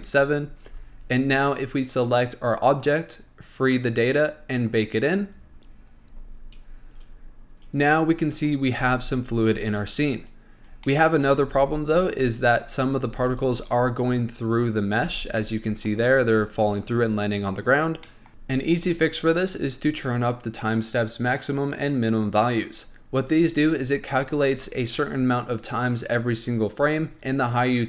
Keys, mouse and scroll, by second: 1.0 Tab, 1.3-2.2 scroll down 1, 2.2 click, 3.8 click, 4.9-7.9 drag, 8.5-9.0 drag, 9.0 space, 10.5-11.2 scroll up 2, 11.2-11.7 shift+middle drag, 11.7 space, 12.5 click, 13.4 space, 13.9-15.3 scroll down 1, 15.3 space, 15.5 scroll up 1, 15.6-18.3 middle drag.